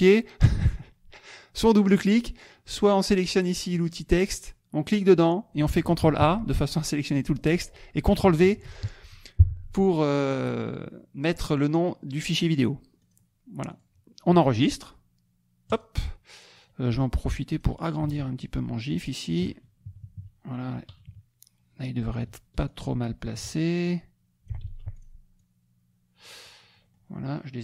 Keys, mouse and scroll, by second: 2.9 click, 3.7 click, 4.9 click, 6.0 ctrl+a, 8.4 ctrl+v, 13.0 click, 13.6 click, 15.7 click, 16.6 click, 17.0 click, 18.3-19.7 ctrl+shift+drag, 19.8 ctrl+shift+KP_Subtract, 20.9 KP_Subtract, 22.7 ctrl+shift+click, 23.8 ctrl+shift+click, 24.7 ctrl+z, 24.9 ctrl+click, 25.3 ctrl+click, 26.6 middle click, 26.7-27.1 scroll up 1.